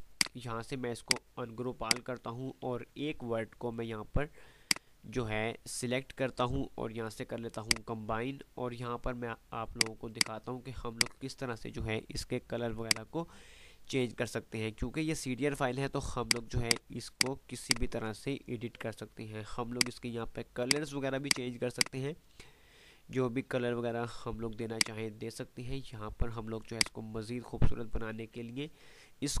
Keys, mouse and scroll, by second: 0.0 click, 1.4 F2, 3.8 click, 4.8-5.7 alt+drag, 8.3 F3, 9.8 click, 10.4 F2, 10.4 right click, 11.0 click, 11.1-11.7 F2, 12.4 click, 13.0-13.4 F2, 16.3 click, 24.3-24.8 typing, 24.8-29.4 drag.